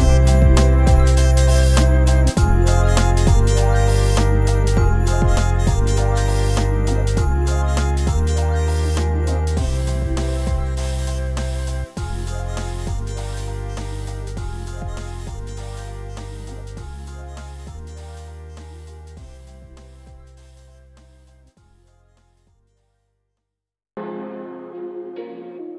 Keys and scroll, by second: 7.3 BackSpace, 11.9 BackSpace, 17.2 BackSpace.